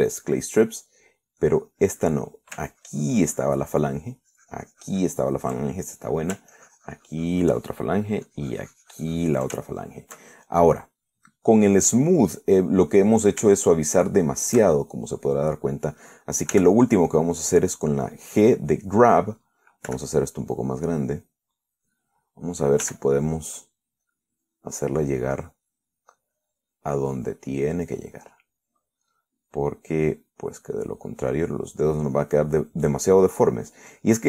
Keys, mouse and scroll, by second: 1.0 3, 2.7 click, 3.8-5.2 ctrl+drag, 5.4-6.5 ctrl+drag, 7.8-8.9 ctrl+drag, 9.5-10.8 ctrl+drag, 11.0 ctrl+shift+middle click, 11.6-13.1 shift+middle drag, 13.1-13.6 scroll up 1, 13.6-14.6 middle drag, 14.6 shift+click, 15.4 shift+middle click, 16.3 click, 17.8 g, 21.1 f, 21.7 click, 22.3 middle click, 24.1 f, 24.4 click, 25.8 click, 27.0 click, 28.9 click, 29.6 middle click, 30.9-32.1 drag, 32.6 click, 33.4 click.